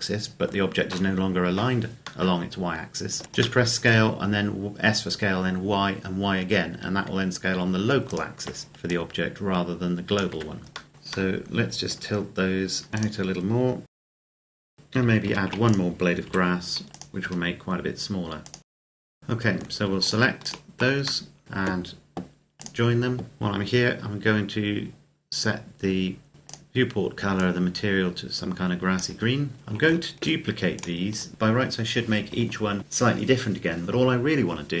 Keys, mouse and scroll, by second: 3.2 scroll up 1, 3.5 shift+middle click, 6.5 Tab, 7.0-7.5 scroll up 1, 7.9 alt+right click, 8.7 click, 10.2 Tab, 10.8 middle click, 10.9 scroll down 1, 11.1 middle click, 12.0-12.9 scroll down 1, 12.9 click, 13.8-17.3 typing, 13.9 shift+scroll up 1, 14.0 click, 14.1 click, 14.6 middle click, 14.7 scroll up 1, 15.0 right click, 15.6 click, 16.9 click, 18.3 click, 18.6 right click, 18.7 g, 18.7 middle click, 18.9 scroll down 1, 19.0 middle click, 19.1 r, 19.1 middle click, 19.8 shift+right click, 21.1 middle click, 21.4 shift+right click, 22.4 click, 25.1-26.1 scroll down 1, 26.1 scroll up 1, 26.3 click, 29.4 scroll down 1, 29.5 right click, 30.6 shift+right click.